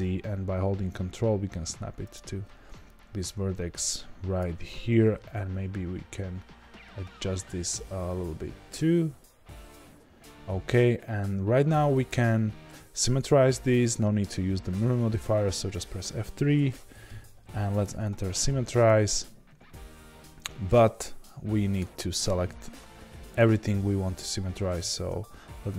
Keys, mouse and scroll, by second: 5.1 g, 21.7 click, 24.3 ctrl+z.